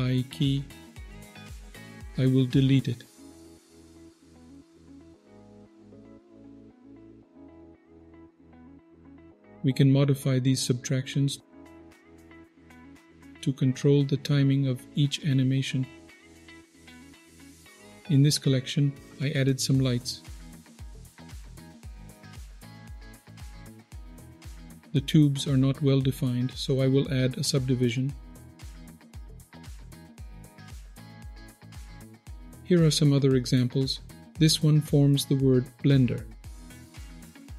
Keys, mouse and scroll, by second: 2.2-4.3 right drag, 4.8 click, 6.5 scroll down 4, 6.7 middle drag, 7.0-8.2 scroll up 6, 8.2 scroll down 2, 8.3 middle click, 8.8 middle click, 9.0 scroll up 2, 9.2 click, 12.0 middle click, 13.3-14.9 drag, 17.4 click, 17.4 scroll down 2, 18.7 click, 20.6 click, 21.3-21.8 scroll up 1, 22.1 F12, 24.3-25.3 scroll down 5, 24.6 middle click, 25.6-26.3 scroll up 6, 27.5 click, 27.5 scroll up 1, 28.2 middle click, 29.2 click, 29.4 middle click, 29.7 scroll down 2, 29.8 middle click, 30.0 scroll up 2, 30.3 click, 30.5-36.3 scroll down 3, 30.8-36.3 middle drag, 36.5 click.